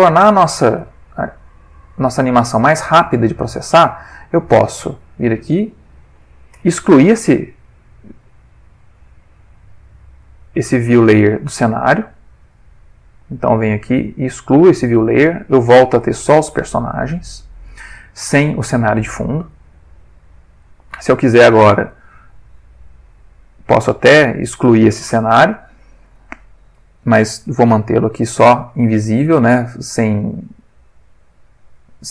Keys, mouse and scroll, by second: 0.2 click, 1.4 ctrl+middle click, 2.3 ctrl+middle click, 3.0 ctrl+middle click, 3.6 ctrl+middle click, 4.4 click, 6.2 Delete, 8.8 click, 10.2 click, 17.2 middle click, 19.9 click, 21.4 click, 30.5-32.0 middle drag.